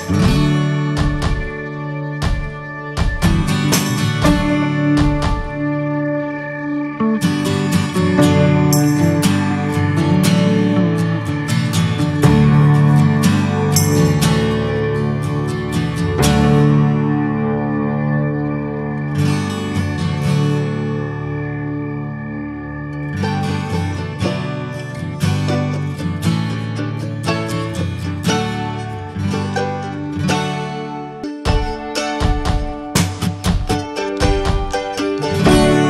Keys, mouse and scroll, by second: 1.7 ctrl+z, 2.1 click, 4.0 ctrl+a, 4.8 click, 5.1 click, 8.9-9.4 drag, 9.4 middle drag, 9.6 scroll up 1, 9.9 shift+middle click, 10.5-12.0 drag, 13.6 scroll down 1, 13.9 scroll up 1, 14.9-15.5 middle drag, 15.5 scroll up 2, 16.4-16.7 scroll down 1, 16.7-17.0 middle drag, 17.0-19.9 scroll up 1, 19.9 click, 20.0 scroll down 1, 20.9 scroll down 1, 21.6 scroll up 2, 21.9 drag, 22.2 click, 22.6 Tab, 23.3 p, 24.5 Tab, 24.5 click, 25.3 click, 26.2 drag, 26.5 drag, 27.7 shift+click, 28.0-30.4 right drag, 30.4 click, 31.5 click, 31.9-33.6 middle drag, 33.6 /, 34.7-35.4 scroll down 1, 35.4 /.